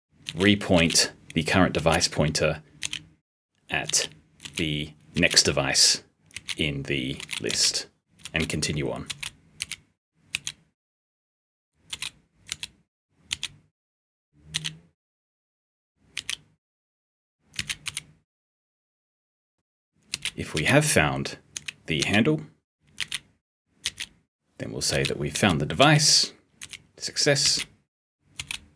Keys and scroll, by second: 17.5 *, 21.5 s, 22.9 *.